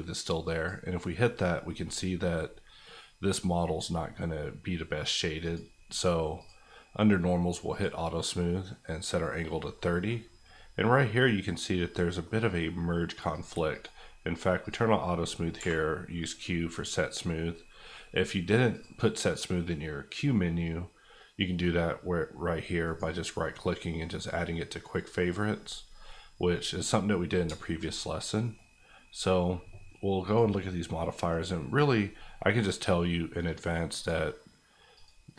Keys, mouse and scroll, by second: 0.4 click, 5.5 click, 9.7-12.5 middle drag, 13.3 click, 15.5 q, 16.2 click, 22.8 right click, 26.0 middle click, 26.6 scroll up 1, 27.1-27.6 scroll down 2, 27.6 shift+middle click, 30.2 click, 30.9 middle click, 33.9 click.